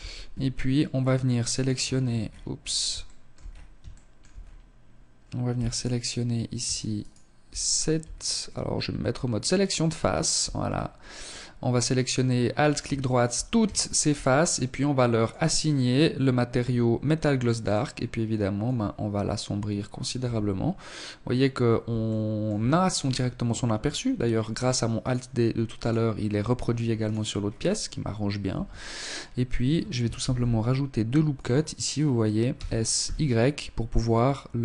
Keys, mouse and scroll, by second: 0.7-2.6 scroll up 13, 2.0 shift+middle click, 2.8 shift+middle click, 3.3-4.4 scroll up 2, 4.6 alt+right click, 5.9 alt+shift+right click, 6.5 alt+right click, 7.0 scroll up 4, 8.3 click, 9.0 alt+right click, 9.4-9.8 scroll down 4, 11.9 shift+middle click, 12.6 shift+middle click, 14.1 click, 16.5 click, 19.1 Tab, 21.0 shift+middle click, 21.9-22.2 scroll down 5, 24.0 right click, 24.8 right click, 26.0 right click, 26.3-27.3 scroll up 10, 27.4 Tab, 29.1 ctrl+r, 31.4 s.